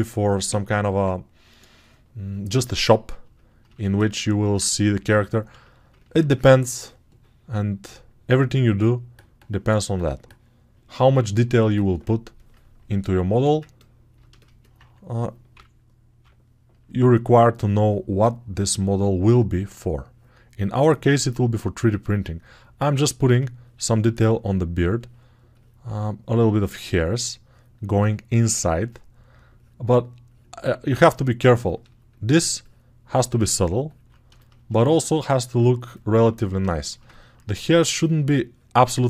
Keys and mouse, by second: 15.4 [, 15.9 [.